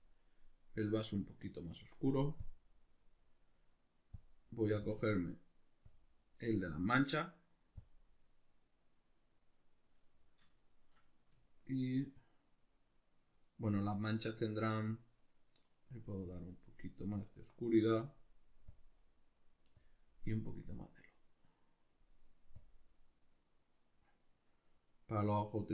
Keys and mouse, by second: 10.6-16.2 shift+middle drag, 16.2-25.7 drag.